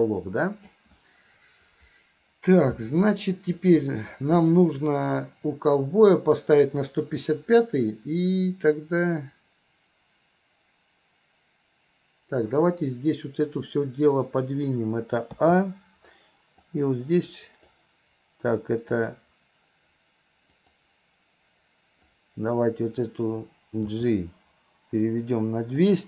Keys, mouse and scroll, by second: 16.6-17.7 drag, 19.1 click, 20.7 click, 22.1-22.6 drag.